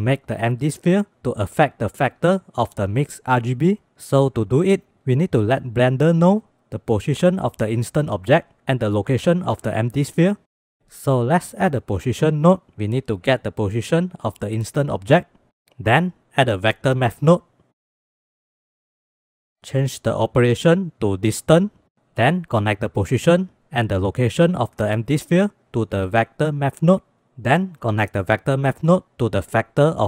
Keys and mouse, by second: 11.3 click, 11.7 click, 12.2 shift+a, 15.9 shift+a, 19.8-21.6 drag, 22.6-23.6 drag, 24.3 click, 27.9-30.0 drag.